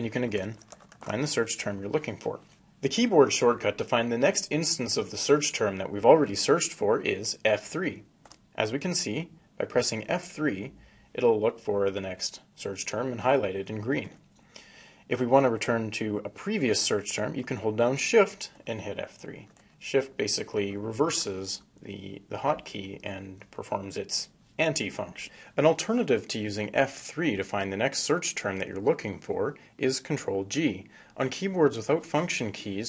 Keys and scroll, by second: 6.4 F3, 18.0 shift+F3, 29.7 ctrl+g.